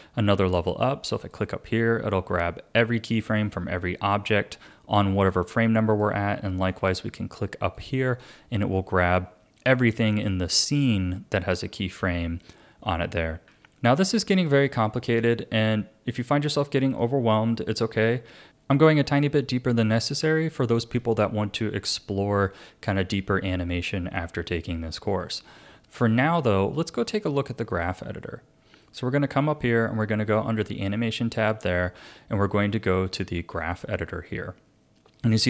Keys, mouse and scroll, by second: 1.2 click, 5.0-6.8 drag, 7.7-10.8 drag, 13.5 a, 16.1 click, 25.8 click, 27.7-30.8 drag.